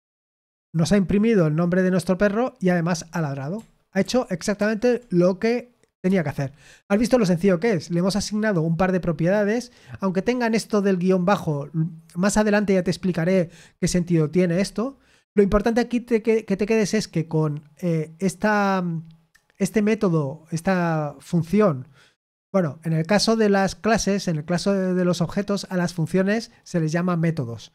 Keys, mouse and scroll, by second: 4.0 ctrl+p, 4.5 ctrl+p, 5.9 Return.